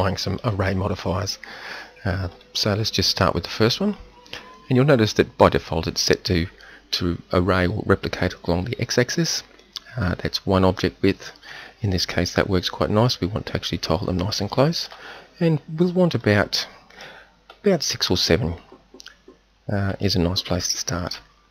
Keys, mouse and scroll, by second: 2.3-11.6 drag, 16.2-19.4 drag.